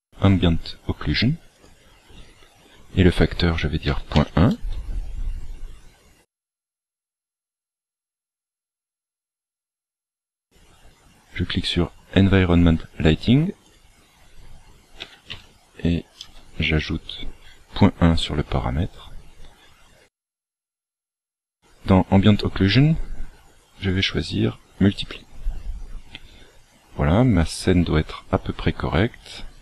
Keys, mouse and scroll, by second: 1.5 click, 6.3 click, 13.6 click, 23.8 click.